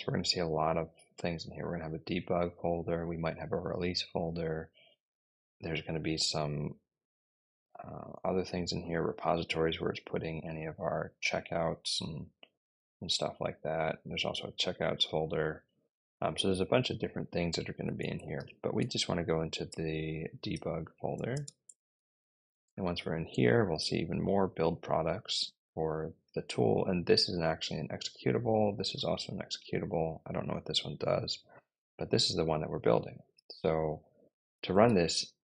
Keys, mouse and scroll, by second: 17.8-22.8 typing, 27.1 click, 27.3 click, 28.8 click, 29.0 click, 31.4 click, 31.6 click, 32.6 click, 34.7-35.5 typing.